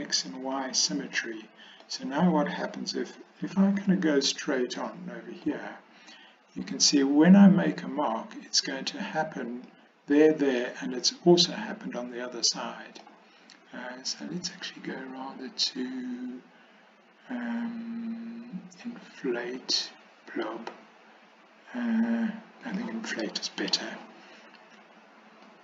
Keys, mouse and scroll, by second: 0.5 click, 1.2 middle click, 3.8 KP_1, 4.8 middle click, 8.4-9.7 drag, 10.6-13.1 middle drag, 22.8 click, 25.5-25.6 drag.